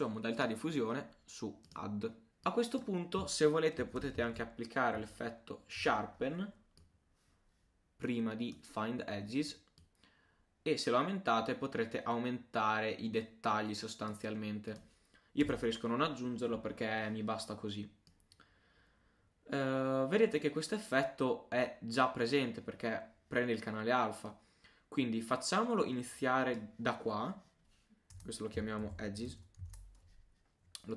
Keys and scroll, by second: 28.6-29.5 typing.